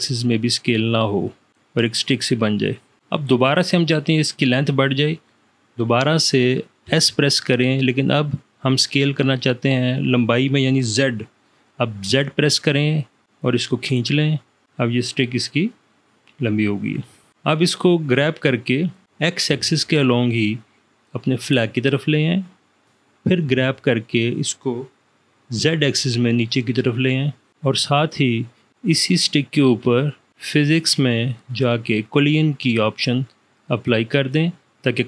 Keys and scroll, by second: 7.0 s, 9.4 s, 12.3 z, 19.0 g, 19.6 x, 23.6 g, 25.6 z.